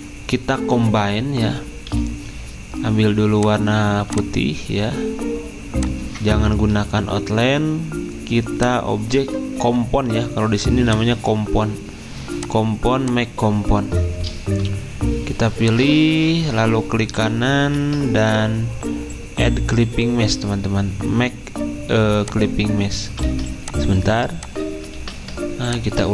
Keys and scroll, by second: 1.9 d, 23.3 ctrl+z, 25.0 ctrl+z.